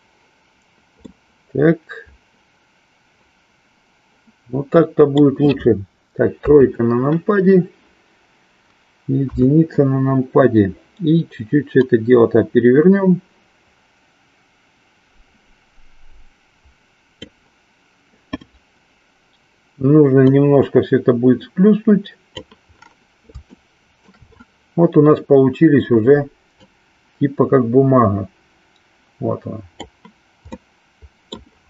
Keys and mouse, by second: 1.0-5.4 middle drag, 6.4 KP_3, 9.2 KP_1, 11.7-17.4 drag, 20.2-22.5 drag, 23.5 shift+middle click, 26.5-30.0 drag, 30.6 middle click.